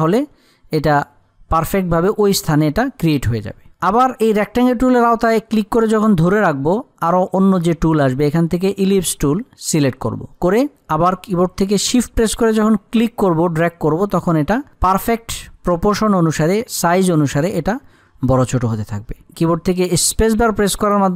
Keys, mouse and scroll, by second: 4.9-12.7 drag, 12.7-20.5 drag, 20.5 shift+space.